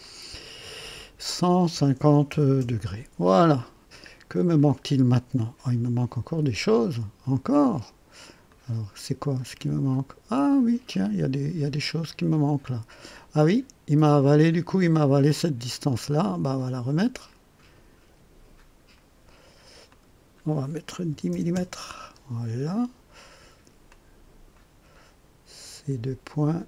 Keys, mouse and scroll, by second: 0.0 click, 1.7 KP_1, 1.9 KP_5, 2.3 KP_0, 2.6 Return, 6.5 click, 7.4 click, 8.4-15.5 drag, 15.7 click, 17.3 click, 18.5 click, 19.8 click, 21.1 KP_1, 21.3 KP_0, 21.5 KP_Enter, 23.9-24.7 drag.